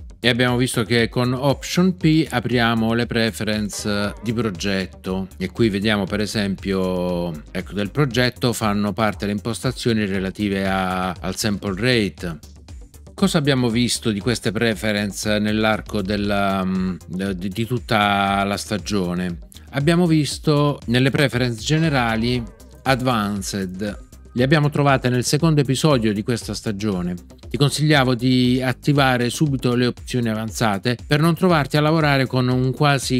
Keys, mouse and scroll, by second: 3.7 alt+p, 21.7 super+,.